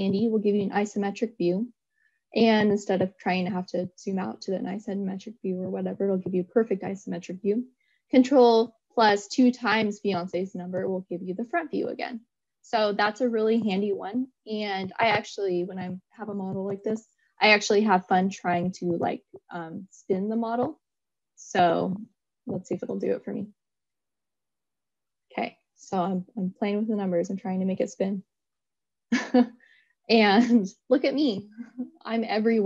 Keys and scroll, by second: 7.7 ctrl+8.